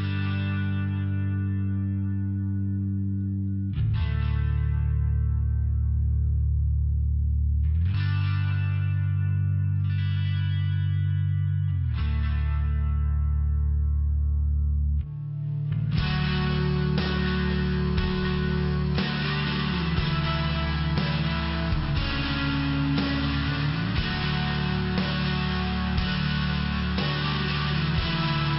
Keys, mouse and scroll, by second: 1.5 click, 1.6 click, 2.5 click, 5.2 click, 8.0 click, 11.1 click, 11.2 click, 13.3 click, 13.5 click, 16.2 click, 16.3 click, 17.5 click, 17.7 click, 18.1 click, 18.2 click, 18.8 click, 18.9 click, 19.4 click, 19.5 click, 19.9 click, 20.0 click, 21.1 click, 21.2 click, 22.2 click, 22.3 click, 23.3 click, 26.9 click.